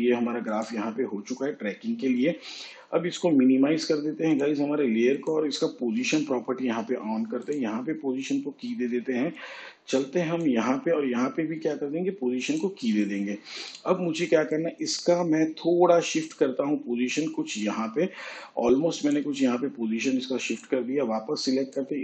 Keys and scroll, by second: 7.8 p.